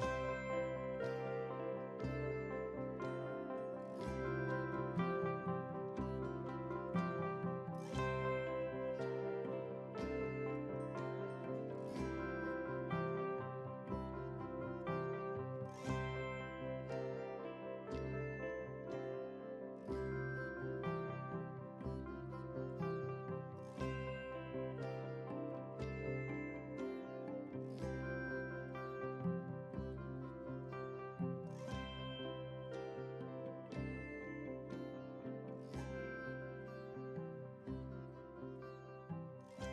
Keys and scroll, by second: 9.6 ctrl+c, 14.7 ctrl+v.